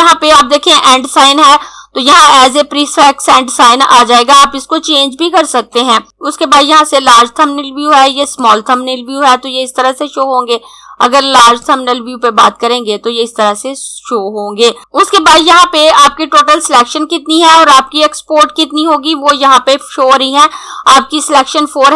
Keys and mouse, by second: 8.2 click, 11.2 click.